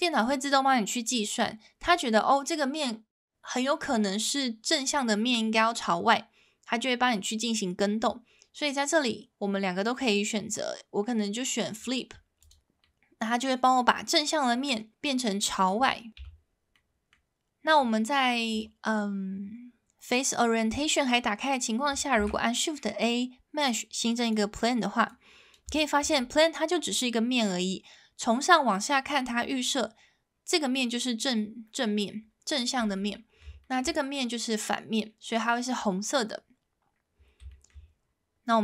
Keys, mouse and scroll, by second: 12.8-14.5 middle drag, 16.2 Tab, 16.7-17.1 middle drag, 18.6-21.2 drag, 22.2 shift+a, 25.1 click, 25.7 shift+middle drag, 26.4 middle drag, 32.9-33.4 middle drag, 33.6 shift+middle drag, 34.0 middle drag, 36.0-37.0 middle drag, 37.5 shift+middle drag.